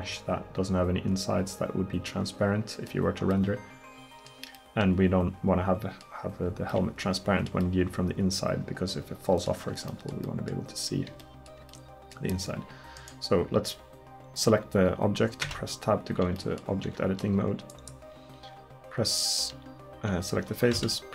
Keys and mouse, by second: 15.5 Tab, 20.8 a.